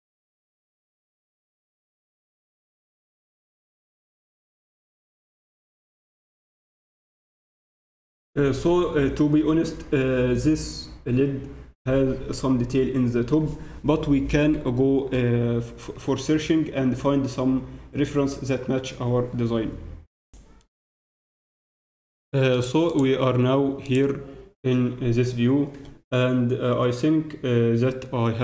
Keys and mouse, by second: 2.7 z, 5.1 KP_1, 23.9-28.4 drag.